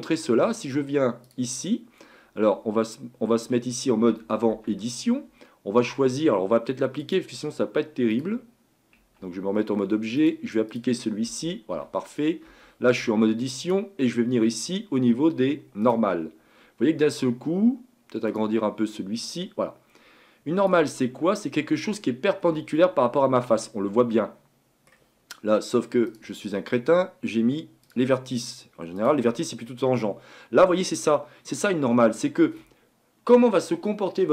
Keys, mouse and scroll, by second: 4.5 Tab, 7.0 click, 8.1-9.0 drag, 9.0 Tab, 10.2-11.2 drag, 11.2 Tab, 11.7 Tab, 13.6-17.7 drag, 18.3-21.0 drag, 21.0-21.8 scroll up 3, 22.4-22.8 scroll down 2, 22.8-25.8 middle drag, 26.1-29.2 drag, 29.7-34.3 middle drag.